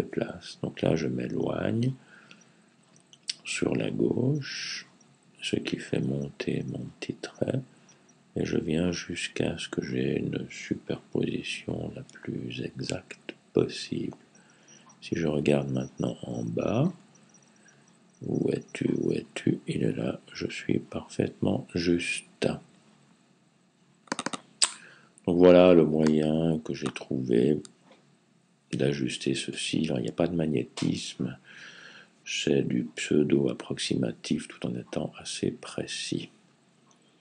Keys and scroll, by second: 1.1 Left, 2.5 Left, 3.8 Left, 4.0 Left, 4.2 Left, 4.4 Left, 4.6 Left, 4.8-5.6 typing, 5.0 Left, 5.2 Left, 5.4 Left.